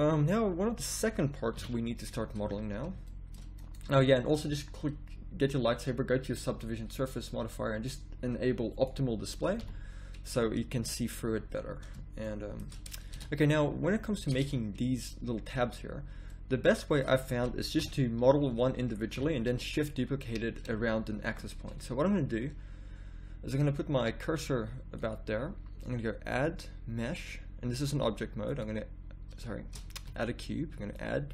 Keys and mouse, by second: 1.5 KP_1, 2.4 z, 3.1-4.7 middle drag, 9.4 middle click, 9.6 a, 13.2 Tab, 14.3 Tab, 17.7-19.5 typing, 29.9 ctrl+z.